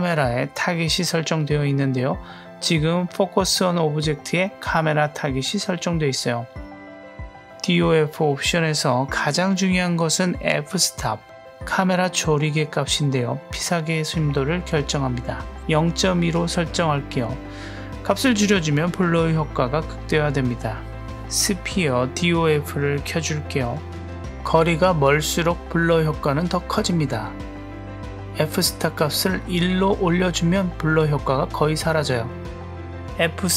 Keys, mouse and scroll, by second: 14.4-16.5 drag, 21.5-22.2 drag, 22.8 click, 23.5 click, 29.4-30.8 drag.